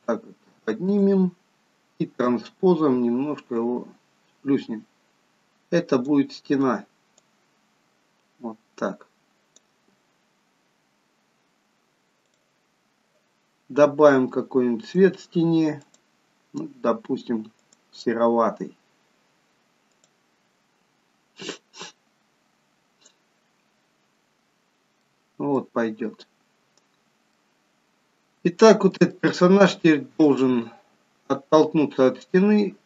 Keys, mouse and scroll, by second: 2.3 click, 3.6 click, 7.3 click, 12.2 click, 14.8 click, 15.9 click, 19.0 click, 20.0 click, 26.4 middle click, 26.4-27.1 scroll down 3, 26.9 scroll up 2, 27.4 middle click, 29.1 shift+middle click.